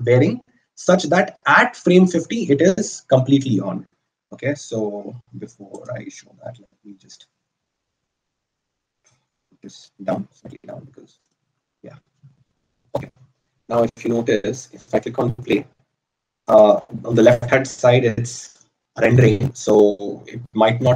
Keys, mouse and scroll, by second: 11.2 g.